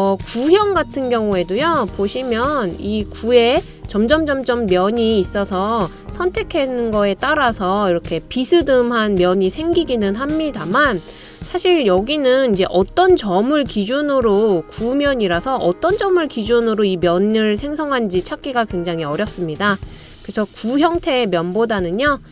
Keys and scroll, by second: 1.5 typing, 21.1 typing.